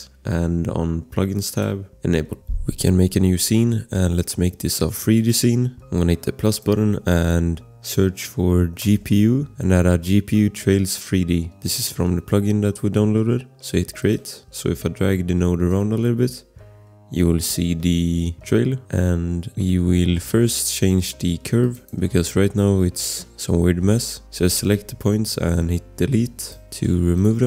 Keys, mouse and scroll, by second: 5.1 click, 7.5 click, 7.5 BackSpace, 8.6-9.6 typing, 9.3 scroll, 14.0 click, 15.7 click, 18.8 ctrl+z, 21.6 click, 26.1 Delete, 26.4 click, 26.8 Delete, 27.1 click.